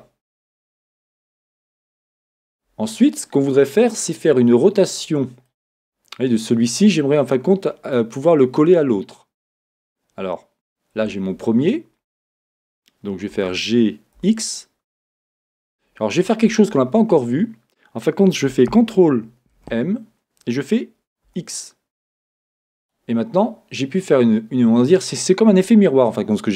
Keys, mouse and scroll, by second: 5.0-5.5 scroll, 5.5 middle click, 5.7 click, 5.7 middle click, 5.9 click, 5.9 middle click, 11.2-13.3 drag, 11.2-13.3 middle drag, 13.3 g, 15.5-19.5 drag, 21.9 ctrl+m, 22.9 click.